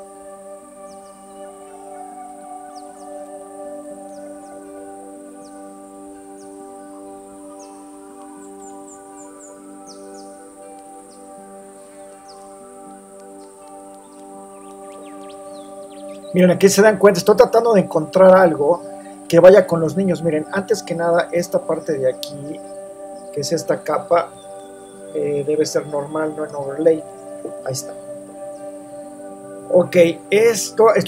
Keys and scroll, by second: 1.1 super+c, 2.0 alt+shift+super+v, 2.3 super+-, 3.6 super+0, 4.5 shift+Return, 12.0 super+a, 12.0 super+c, 12.8 alt+shift+super+v, 13.0 super+t, 13.1 super+-, 14.2 Return, 14.4 super+0.